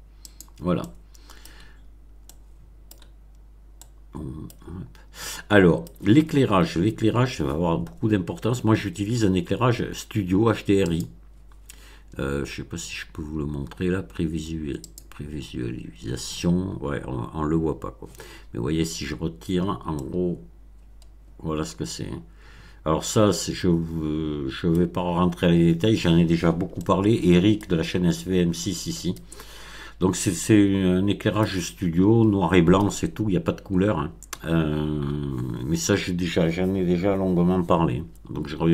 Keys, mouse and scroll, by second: 0.2 click, 0.7-1.6 middle drag, 2.2-3.1 middle drag, 3.8-4.6 middle drag, 5.2-6.0 middle drag, 10.8 click, 12.1 scroll up 1, 14.8 click, 18.2-19.0 scroll down 2, 19.3-19.7 scroll down 1, 19.9-24.9 middle drag, 25.1-25.6 scroll up 2, 26.7-27.8 shift+middle drag, 27.9-28.4 shift+scroll up 3, 28.5-29.3 shift+middle drag, 29.5-29.9 shift+scroll up 3, 30.1-31.5 middle drag.